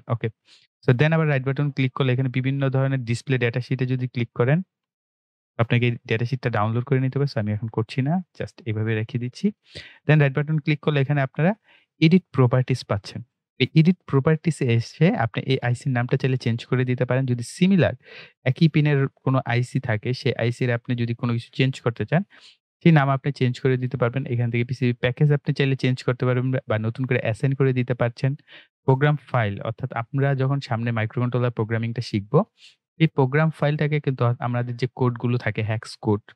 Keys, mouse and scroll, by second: 3.4 click, 7.8 click, 12.9 click, 15.5-20.9 drag, 22.8-25.7 drag, 30.2-34.7 drag.